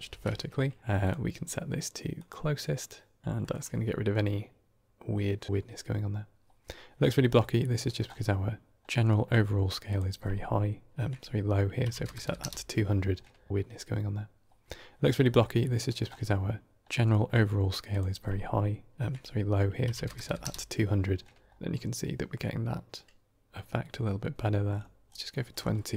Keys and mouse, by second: 0.0 ctrl+space, 1.0-2.2 drag, 3.3 shift+middle drag, 7.2 middle click, 7.4 middle click, 7.8 middle drag, 8.8 middle click, 9.8-12.8 drag, 12.1 KP_0, 15.2 middle click, 15.5 middle click, 15.8 middle drag, 16.9 middle click, 17.9-20.9 drag, 20.1 KP_0, 25.7 middle click.